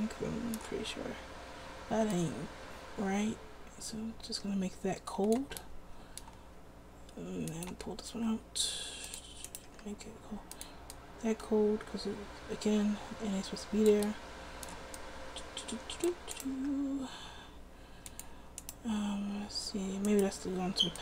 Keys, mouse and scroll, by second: 8.2 r, 9.9 r, 16.8 r.